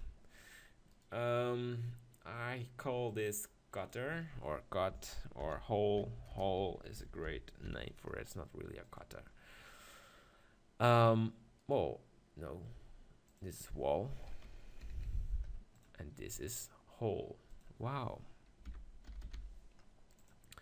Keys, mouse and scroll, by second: 0.4 right click, 0.5 click, 0.9 middle click, 1.1-5.4 right drag, 5.4-8.1 middle drag, 8.1 BackSpace, 9.3-10.9 middle drag, 10.9-15.5 drag, 15.5 l, 16.4-19.8 drag.